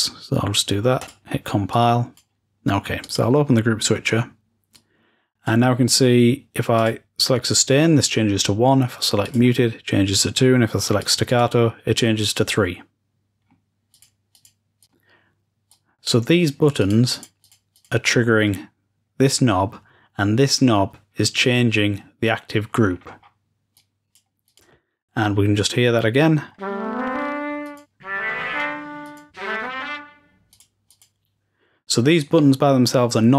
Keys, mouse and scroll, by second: 0.9 click, 1.6-2.1 drag, 2.9 click, 4.6-5.4 drag, 6.7 click, 9.1-10.9 drag, 11.1-13.7 drag, 13.8-19.9 drag, 22.9-23.8 scroll down 2, 23.8-27.0 drag, 23.8-24.2 scroll down 1, 27.6-30.0 drag, 30.5-31.8 drag.